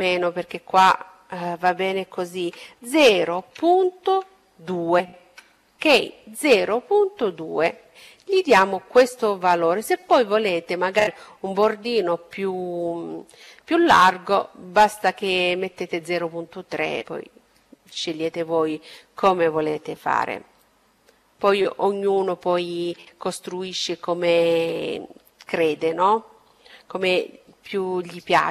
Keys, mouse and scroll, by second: 20.3-22.9 middle drag.